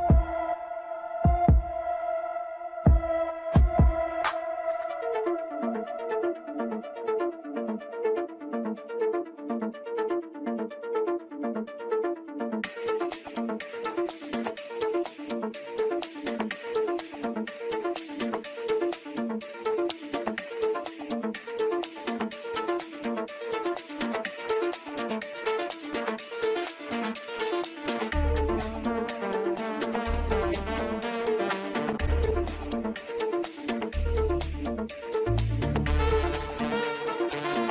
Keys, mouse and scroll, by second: 0.8 click, 1.0-4.0 drag, 5.8 click, 7.4 drag, 7.6 shift+click, 7.8 shift+click, 8.0 shift+drag, 8.3 shift+click, 8.5 shift+drag, 8.8 shift+drag, 9.0 shift+drag, 9.2 shift+click, 10.3 ctrl+j, 12.7 click, 13.0-15.6 drag, 15.6-15.9 scroll down 2, 15.9 click, 16.5-16.8 scroll up 2, 17.7 drag, 18.5 click, 21.8 click, 23.4 click, 25.1-26.1 drag, 27.2-28.6 drag, 29.7 click, 31.1-31.5 scroll down 3, 31.5-32.8 middle drag, 32.8 scroll up 2, 34.0-35.0 middle drag, 35.0-37.7 scroll down 1.